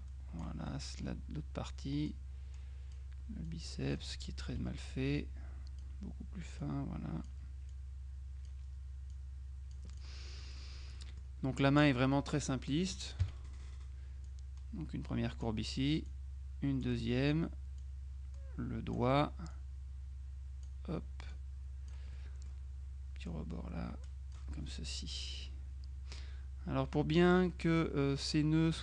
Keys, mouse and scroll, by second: 0.8 right click, 2.2-3.5 drag, 4.6 F2, 5.0-6.4 drag, 6.7 click, 9.2 click, 11.0 middle click, 11.0-11.8 scroll up 2, 11.2 middle click, 12.8 click, 13.3 F6, 14.3-16.0 drag, 16.2-17.4 drag, 17.9-19.5 drag, 19.6-21.2 drag, 21.4-22.5 drag, 23.4-24.9 drag, 26.3 F2, 27.6 middle click.